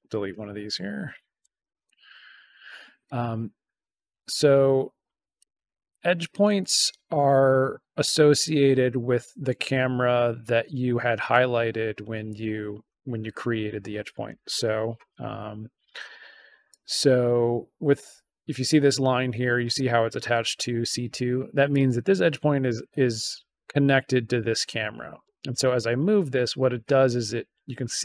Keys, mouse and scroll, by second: 0.1 click, 0.6 BackSpace, 1.6 shift+BackSpace, 3.0-5.3 drag, 5.8-7.3 drag, 8.0 click, 16.6 click, 18.4 click, 21.6-23.6 drag, 25.1-28.0 drag.